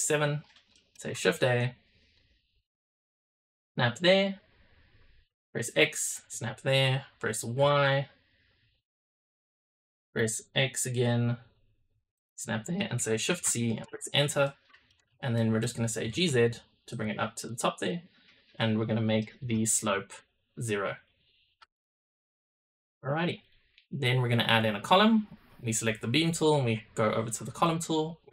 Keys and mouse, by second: 0.6 shift+drag, 1.1 shift+a, 14.3-14.8 drag, 15.3 click, 15.9 g, 17.3 click, 17.7 click, 18.9-19.6 drag, 20.8 click, 21.8-22.2 shift+middle drag, 22.7 middle click, 23.9-26.3 drag, 27.6 click.